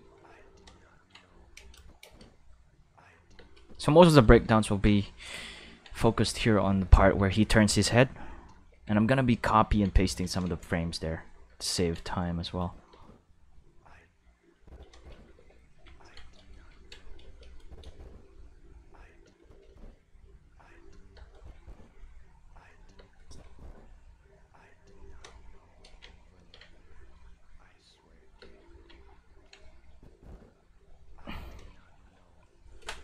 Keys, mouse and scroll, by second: 0.9 ctrl+middle click, 1.5 space, 1.7 click, 2.0 space, 3.3 space, 3.5 click, 4.5 ctrl+middle click, 6.0 middle click, 6.5 click, 7.1 space, 8.5 space, 8.9 ctrl+middle click, 11.2 middle click, 11.6 ctrl+middle click, 12.0 middle click, 12.6 click, 12.9 space, 14.0 space, 14.5 click, 14.9 space, 15.3 q, 15.9 ctrl+middle click, 16.5 middle click, 17.2 space, 17.5 click, 17.8 space, 19.2 space, 19.3 click, 19.6 space, 21.1 space, 21.3 click, 21.5 space, 22.9 space, 23.1 click, 23.4 space, 26.1 ctrl+middle click, 26.7 middle click, 28.3 space, 29.0 ctrl+middle click, 29.8 click, 30.0 space, 31.9 middle click, 32.2 middle click.